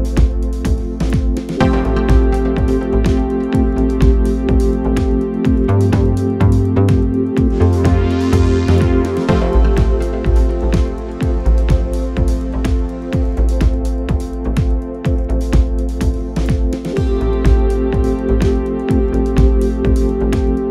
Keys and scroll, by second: 2.1 4, 2.9 3, 3.3 4, 4.1 3, 6.1 p, 8.1 p, 9.2 p, 11.2 p, 13.1 p, 14.1 p, 16.1 p, 17.4 p, 18.5 p.